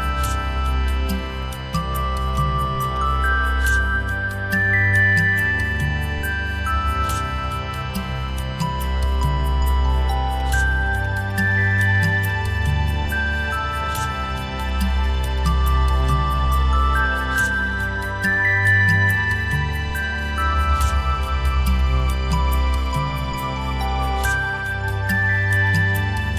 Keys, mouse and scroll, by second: 2.8 right click, 4.3 ctrl+z, 11.0 shift+click, 11.8 shift+click, 12.9 shift+click, 15.3 shift+click, 20.0 right click, 21.7 shift+click, 24.6 shift+click, 25.7 ctrl+click.